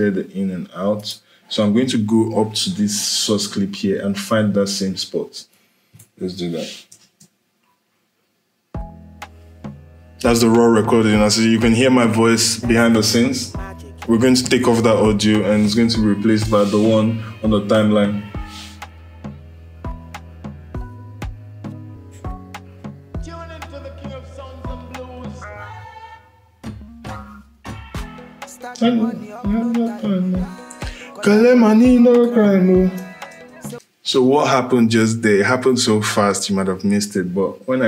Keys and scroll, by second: 6.8 space, 32.5 i, 33.1 space.